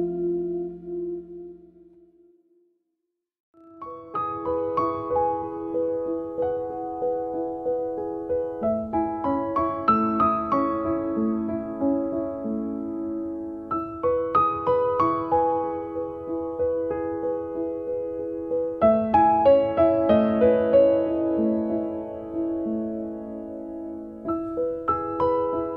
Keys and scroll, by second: 0.0 3, 0.5 Return, 1.1 space, 5.6 r, 8.6 space, 13.2 f, 14.8 4, 15.2 Return, 15.8 space, 17.9 p, 19.9 3, 20.5 Return, 23.1 KP_Decimal, 23.3 5, 24.0 Return.